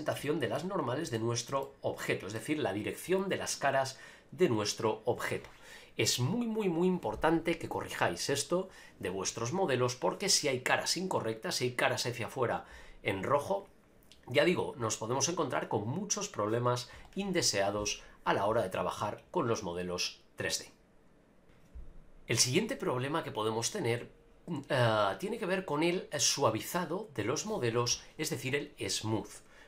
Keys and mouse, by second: 0.2 shift+middle drag, 1.1-1.5 shift+middle drag, 1.6 middle click, 19.5-21.0 drag.